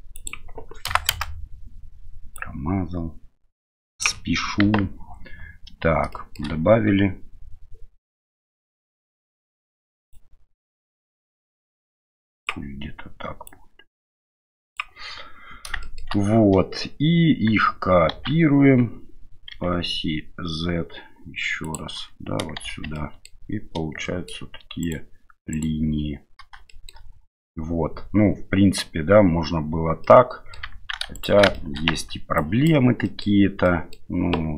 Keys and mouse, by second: 0.1-1.2 drag, 2.4-4.0 drag, 4.6 KP_1, 6.1 shift+middle drag, 10.1-12.4 drag, 13.5-14.8 drag, 15.8 shift+middle drag, 18.1 shift+d, 22.6 shift+z, 23.0 middle drag, 24.1 shift+middle click, 24.8-25.6 right drag, 26.7 shift+middle drag, 30.0-30.5 middle drag, 31.5 shift+middle drag, 31.9 Tab, 32.4 click, 33.0 middle click, 33.6 middle click.